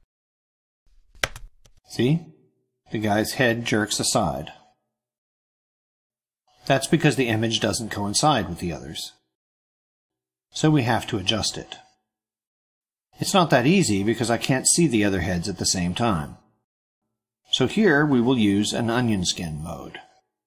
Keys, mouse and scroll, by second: 0.0 e, 0.3 r, 1.1 Return, 5.2-10.0 drag.